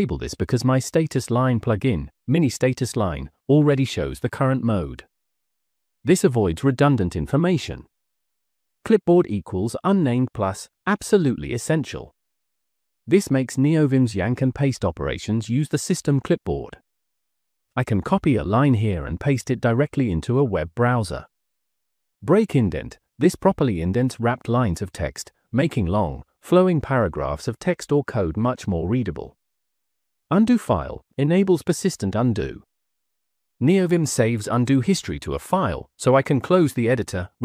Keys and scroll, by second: 7.1 j, 7.3 j, 7.6 j, 7.9 j, 11.7-14.0 typing, 20.1 Escape, 20.4 j, 20.7 j, 21.0 j, 29.0 j, 29.2 j, 29.5 j, 32.4 shift+v, 33.8 Escape.